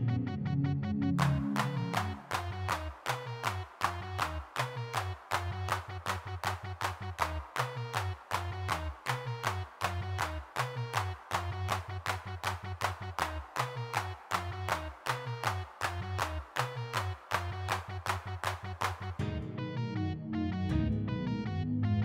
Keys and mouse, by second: 0.3 middle click, 1.4 middle click, 1.8 shift+c, 2.3 click, 2.7 middle click, 4.0 middle click, 4.6 3, 6.7 middle click, 7.4 middle click, 11.3 middle click, 11.9 middle click, 12.1 click, 12.7 middle click, 15.5 middle click, 17.6 middle click, 17.9-19.2 middle drag, 19.9-21.4 drag, 21.4 middle click.